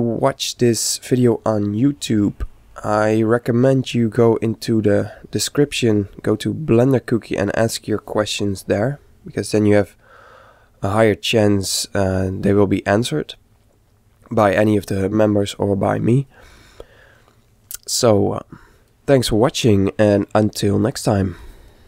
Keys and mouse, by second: 4.3-6.1 middle drag, 8.1-9.9 middle drag.